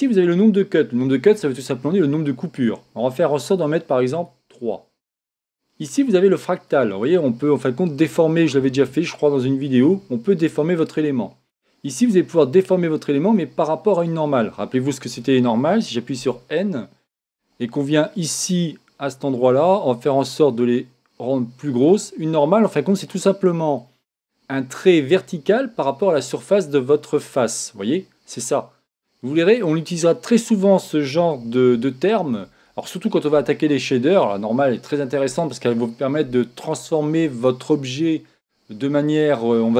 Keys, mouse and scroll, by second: 3.5 click, 6.6 click, 11.8 click, 16.1 n, 18.3 click, 20.2 click, 22.3-25.6 middle drag, 27.2-29.1 middle drag, 30.4 scroll up 1, 30.6 middle click, 31.4-31.9 scroll down 1, 31.9-33.5 middle drag.